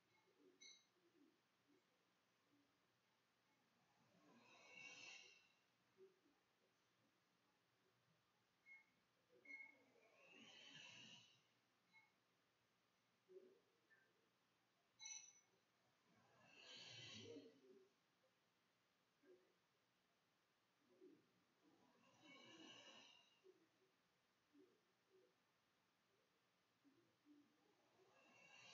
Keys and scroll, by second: 0.0-7.0 typing, 11.9-12.6 typing, 13.2 Tab, 14.0-16.4 typing, 17.7-19.7 typing, 19.7 Return, 20.6 shift+Return, 20.9 shift+], 21.4 shift+Return, 22.4 Return, 22.5 \, 23.2 ], 24.8 ', 25.0 ;, 25.8 ;, 27.0 [.